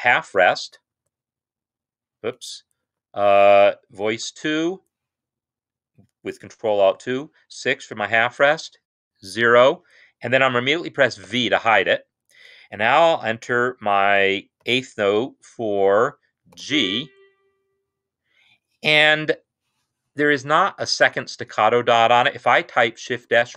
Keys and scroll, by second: 1.0 0, 2.8 ctrl+z, 4.2 ctrl+alt+2, 6.7 6, 8.4 typing, 11.0 v, 14.6 typing, 16.3 typing.